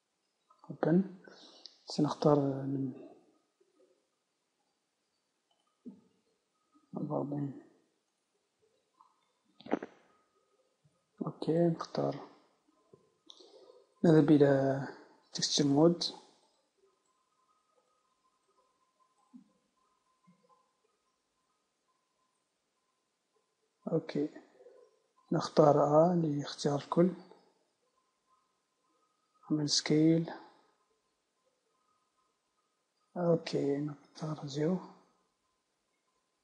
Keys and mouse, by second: 6.7 Left, 6.9 Left, 16.4-18.4 drag, 18.6 middle click, 22.9 Tab, 24.0 Tab, 25.9-27.1 drag, 25.9 a, 27.1 s, 31.5 Tab, 31.5-34.0 drag, 34.0 KP_0.